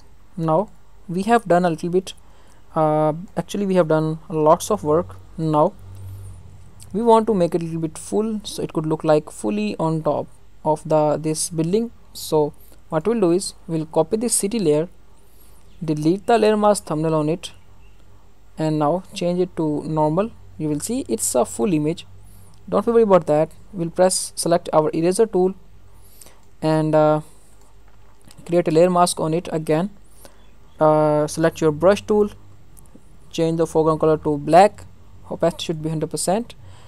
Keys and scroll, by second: 14.1 ctrl+j.